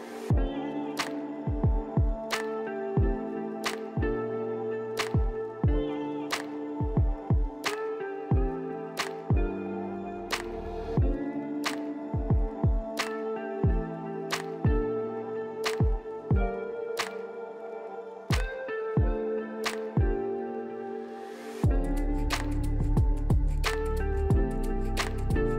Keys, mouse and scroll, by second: 0.2-0.6 scroll up 5, 1.2-2.3 scroll down 9, 2.3-2.6 scroll up 3, 5.7 middle click, 5.9 scroll up 1, 15.7 middle click, 22.9 middle click.